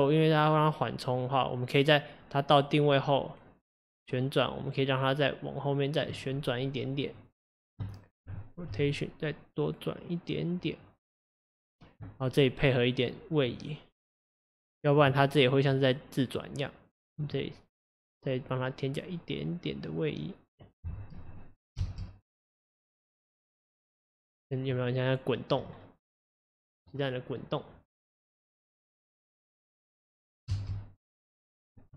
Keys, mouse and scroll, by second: 6.4-6.8 scroll up 4, 7.3 click, 8.7 r, 13.6 click, 15.7-19.7 drag, 21.4 click, 21.9 space, 25.6-26.4 scroll down 5, 30.5 space.